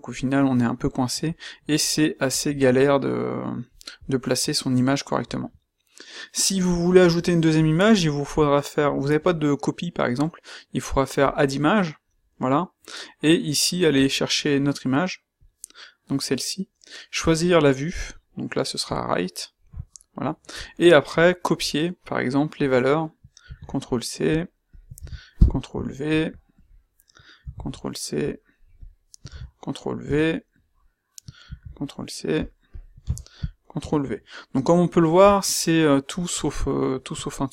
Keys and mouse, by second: 37.0 q.